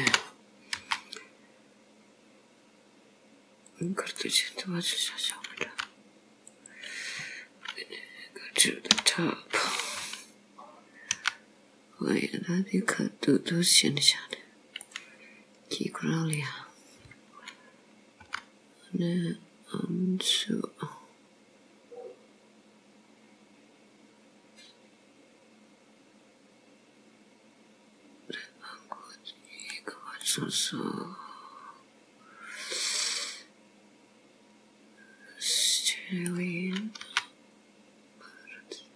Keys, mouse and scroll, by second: 0.1 g, 4.2 middle click, 5.7 g, 9.0 KP_7, 11.2 r, 14.8 scroll down 1, 14.9 middle click, 16.7-17.4 scroll up 3, 18.3 g, 30.2 middle click, 37.0 r.